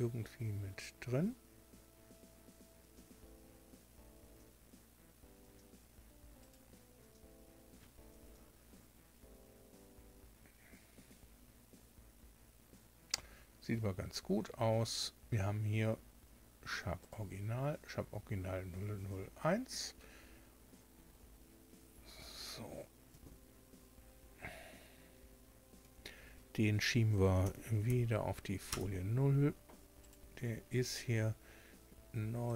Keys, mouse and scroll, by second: 6.3 right click, 16.9 right click, 27.3 m, 27.8 0, 28.6 Return, 29.9 right click, 32.4 click.